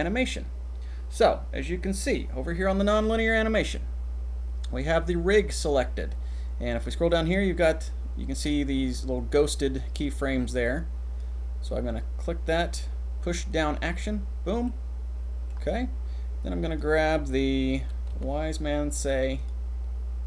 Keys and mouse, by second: 0.0 click, 2.0 click, 10.5 click, 13.5 click, 14.7 middle click, 16.7-19.5 middle drag.